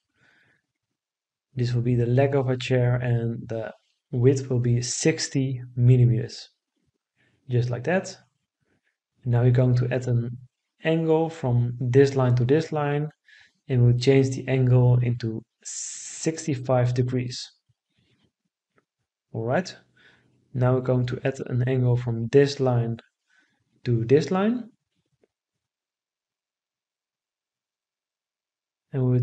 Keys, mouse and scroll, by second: 3.3 6, 3.7 0, 4.2 Return, 15.0 6, 15.7 5, 16.2 Return.